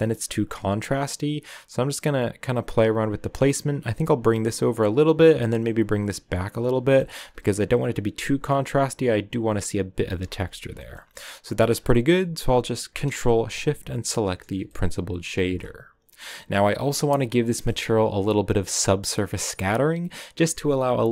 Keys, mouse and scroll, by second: 6.9 shift+middle click, 7.1-8.1 scroll up 5, 8.1-10.1 shift+middle drag, 10.1 scroll down 5, 10.7-13.9 shift+middle drag, 13.9 ctrl+shift+click, 14.5-15.1 scroll down 2, 15.4 a, 15.8-21.1 drag.